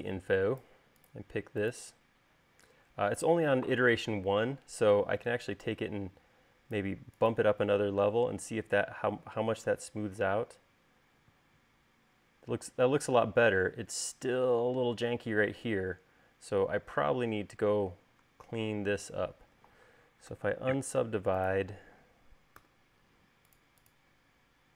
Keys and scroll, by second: 20.8 u, 23.1 u.